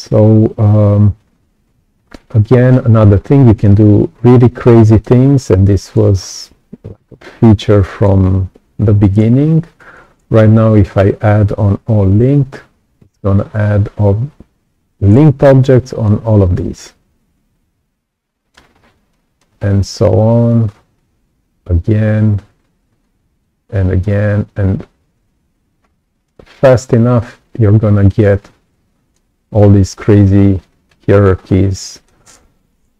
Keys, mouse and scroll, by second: 2.2 right click, 2.3 click, 3.4 click, 4.0-4.4 scroll down 2, 4.6 right click, 5.2-5.6 scroll down 2, 5.6 right click, 6.1-6.5 scroll up 2, 7.0-7.3 scroll down 2, 7.4 right click, 7.5 click, 12.5-16.0 alt+drag, 16.3-16.7 scroll up 2, 16.8-18.5 right drag, 16.8-18.5 drag, 18.7-19.8 scroll down 4, 19.0 right click, 20.4-23.0 alt+drag, 23.4 alt+click, 24.2-24.6 scroll up 1, 25.7-26.1 scroll up 1, 26.2-29.1 right drag, 26.3-28.1 drag, 28.7 click, 29.5-31.2 right drag, 29.5-30.8 drag, 31.3-31.7 scroll down 2, 31.8 right click.